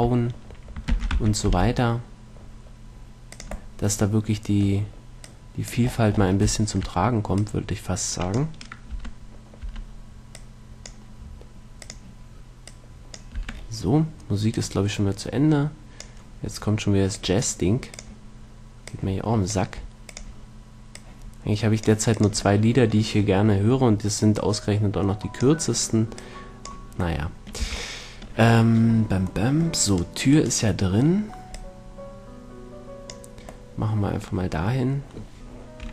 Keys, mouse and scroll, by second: 1.2 shift+d, 3.8-5.5 drag, 9.2 Tab, 10.0 Tab, 10.7-14.8 drag, 13.7 Tab, 16.0 Tab, 22.4-25.1 drag, 27.5 middle click, 27.9 a, 30.2-32.2 middle drag, 31.8 click, 31.8 right click, 32.6 click, 34.0-35.9 middle drag.